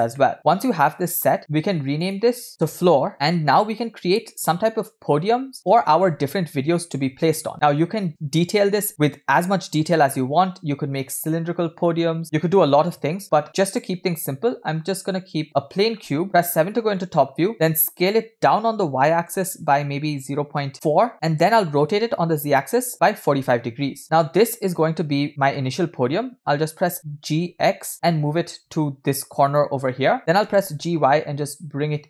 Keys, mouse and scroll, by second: 0.2 middle click, 1.2 scroll up 2, 1.4 shift+middle click, 2.5-7.9 shift+drag, 8.0 scroll up 2, 8.1-8.7 shift+middle drag, 13.2 shift+a, 16.3 KP_7, 16.7 scroll down 1, 17.0-17.3 shift+middle drag, 17.4 scroll up 1, 18.1 s.